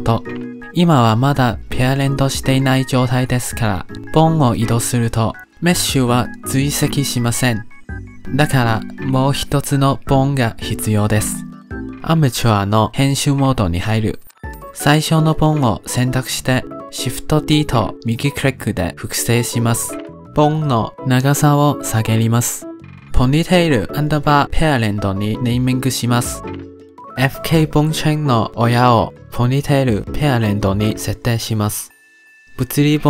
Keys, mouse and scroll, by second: 0.3 click, 0.8-1.9 shift+middle drag, 1.9 click, 2.6 g, 3.9-4.8 middle drag, 4.8 g, 7.7 click, 9.3-9.9 drag, 9.9-13.6 middle drag, 13.6 click, 13.7 shift+middle click, 14.3 scroll up 1, 16.1 click, 16.9 shift+d, 19.5 click, 21.1-22.1 drag, 23.9 click, 24.2-25.3 drag, 27.2 click, 28.2-31.4 drag, 32.1 click, 32.7 click.